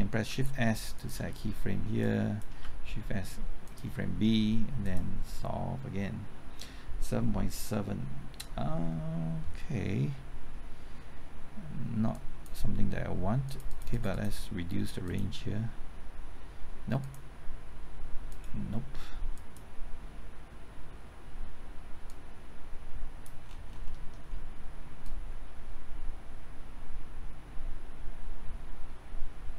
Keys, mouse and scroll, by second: 0.0-0.9 typing, 2.0 click, 2.5-4.2 typing, 4.8-23.2 drag, 23.4-23.8 scroll down 1, 23.8 middle click, 24.2-24.7 scroll up 1, 25.0-29.5 drag.